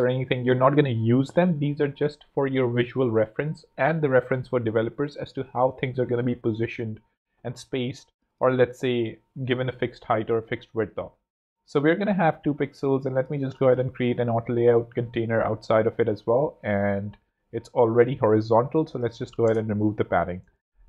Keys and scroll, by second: 10.9 super+d, 11.5 super+z, 14.0 shift+a, 19.2 0, 19.3 Home.